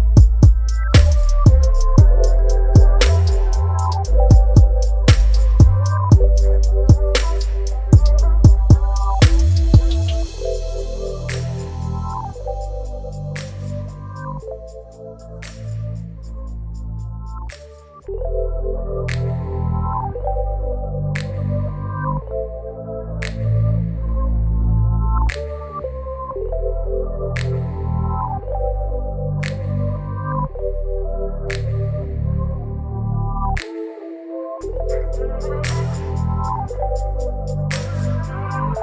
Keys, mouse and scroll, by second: 3.4 click, 8.0 g, 9.8 ctrl+t, 12.9 ctrl+t, 13.0-23.1 alt+drag, 26.4 click.